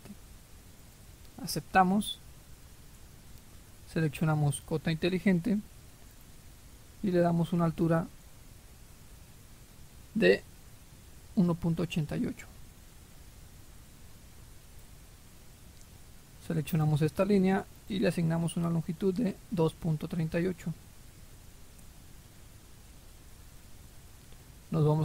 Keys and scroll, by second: 12.3-14.0 typing, 14.7 Return, 19.3-21.2 typing, 21.7 Return.